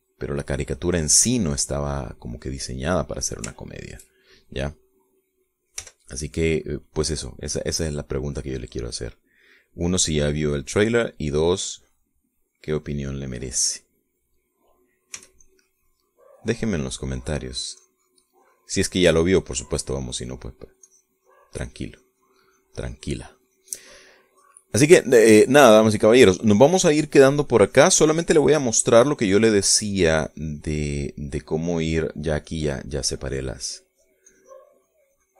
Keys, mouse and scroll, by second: 2.7-4.8 drag, 5.0 shift+click, 6.3 click, 7.2 g, 7.6 click, 9.0 click, 10.2 click, 11.4 click, 12.6 click, 14.1 click, 14.8-16.0 drag, 16.6 s, 16.8-18.6 drag, 18.6 middle click, 21.6-25.5 middle drag, 26.2-32.5 drag, 32.6-34.5 middle drag.